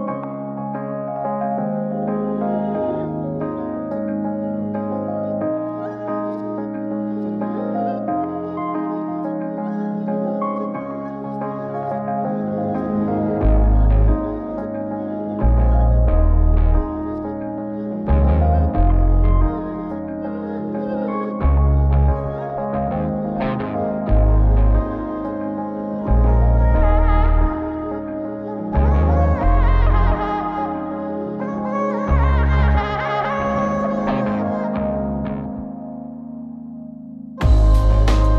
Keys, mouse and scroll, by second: 0.3 middle click, 2.1 click, 3.4 Tab, 4.8 a, 6.5-7.7 drag, 11.7 click, 12.9-13.4 scroll up 2, 13.4 middle click, 14.0-14.4 scroll up 1, 14.4-14.7 middle drag, 15.0 middle click, 15.3 scroll up 1, 15.4-16.0 scroll down 1, 16.2 middle click, 17.2-18.0 drag, 19.7-21.8 drag, 24.1 click, 25.7-26.7 drag, 27.5 click, 28.9 click, 30.9-38.3 drag.